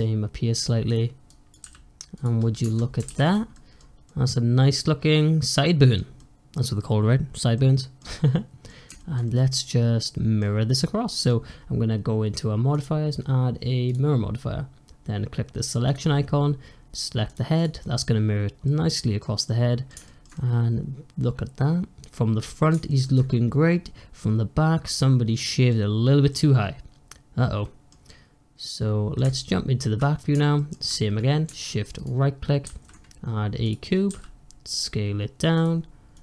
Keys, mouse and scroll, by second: 1.2 click, 1.5 s, 2.5 Tab, 2.9 alt+z, 3.1 click, 3.4 middle drag, 3.7 scroll down 3, 4.0-5.8 middle drag, 5.8 scroll up 2, 6.0-8.0 middle drag, 8.0 scroll down 2, 8.2-8.6 middle drag, 8.6 scroll up 2, 8.8-10.3 shift+middle drag, 10.3-10.7 scroll down 1, 10.7 click, 11.0 middle click, 11.3-12.6 scroll up 1, 12.6-15.8 drag, 17.5 click, 17.7-29.1 middle drag, 29.1 `, 30.5-31.8 shift+middle drag, 31.8 shift+right click, 32.2-32.5 shift+scroll up 1, 32.5 shift+a, 34.0 s, 36.0-36.2 drag.